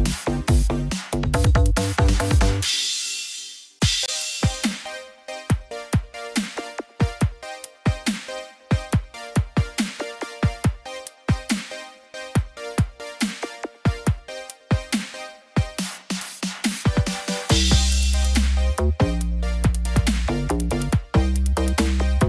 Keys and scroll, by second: 20.6 ctrl+0.